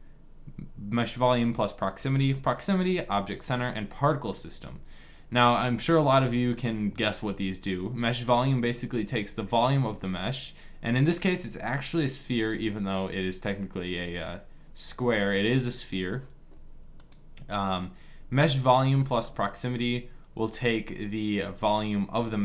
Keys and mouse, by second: 5.9-7.9 drag, 9.2-11.0 middle drag, 16.9 click, 17.7-18.7 drag, 18.7-20.6 middle drag.